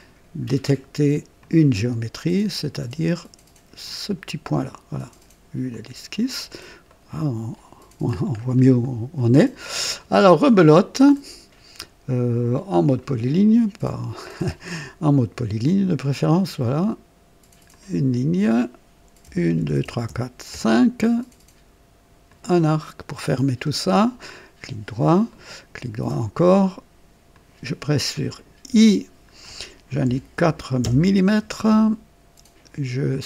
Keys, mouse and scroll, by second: 1.4 click, 3.8 click, 5.7 click, 6.9 right click, 8.3 scroll up 1, 8.8 right click, 10.7 click, 12.9 click, 15.6 click, 17.7 click, 19.2-20.5 typing, 22.2 click, 23.4 scroll up 1, 23.6 typing, 23.9 right click, 25.3 right click, 27.3 click, 28.7 i, 30.0 KP_4, 30.8 KP_Enter, 33.1 click.